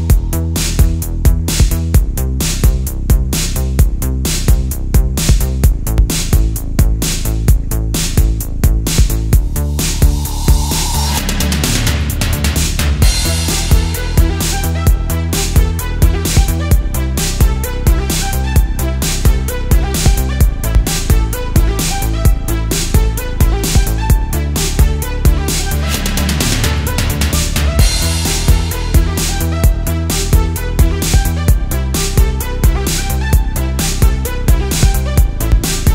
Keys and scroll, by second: 0.4 space, 1.2 space, 3.1 space, 3.7 space, 4.0 space, 7.5 space, 8.9 space, 9.9 alt+super+space, 11.4 space, 11.7 space, 12.4 super+z, 13.0 super+z, 13.1 alt+super+space, 13.8 alt+super+space, 15.7 space, 18.6 alt+super+space, 20.0 super+z, 21.3 super+z, 21.5 super+space, 23.9 space, 28.4 alt+super+space, 28.9 super+space, 29.0 super+space, 31.3 super+z, 33.0 super+z, 34.3 space, 34.9 space.